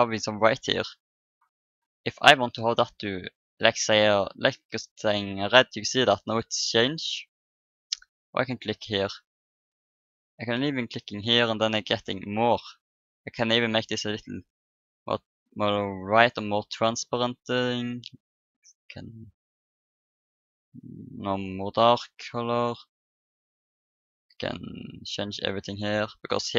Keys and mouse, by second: 2.1-3.9 drag, 8.0-10.5 drag, 10.8-12.5 drag, 13.9-15.7 drag, 16.9-18.7 drag, 19.0-20.9 drag, 22.9-25.8 drag, 25.8-26.5 middle drag.